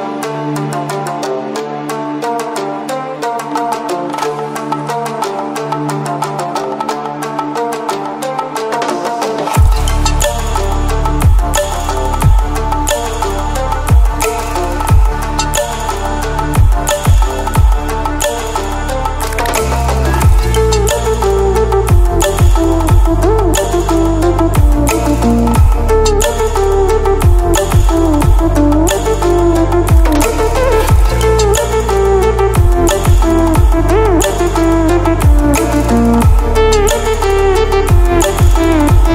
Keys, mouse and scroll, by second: 2.9 click, 5.6 click, 6.3 Right, 7.0 click, 9.9-16.0 alt+drag, 16.0 ctrl+d, 18.8-20.5 ctrl+alt+scroll down 2, 20.5 ctrl+d, 20.9-22.5 drag, 22.5 Right, 24.5 click, 24.7 Right, 26.1 click, 26.2 Right, 28.1 click, 28.8 Right, 29.7 click, 30.4 Right, 31.8 Left, 32.5 click, 35.3 Right, 35.7 click.